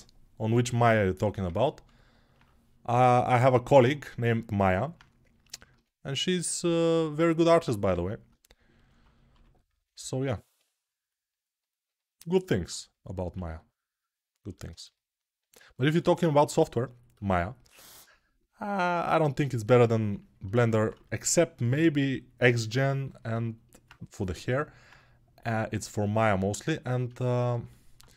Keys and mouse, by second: 3.6-9.5 alt+middle drag, 9.1 g, 9.5-28.1 alt+drag, 13.1 1, 19.9 ctrl+1.